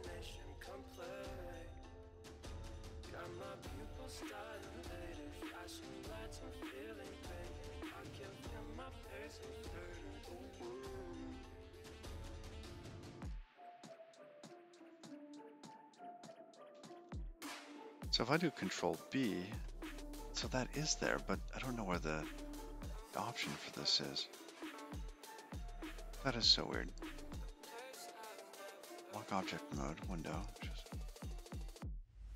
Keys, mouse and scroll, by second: 0.0 click, 0.8 click, 1.7-2.1 scroll down 3, 4.5 click, 6.0-7.8 scroll up 29, 12.6 click, 17.6 ctrl+b, 24.5 click, 28.1 click, 30.3 click.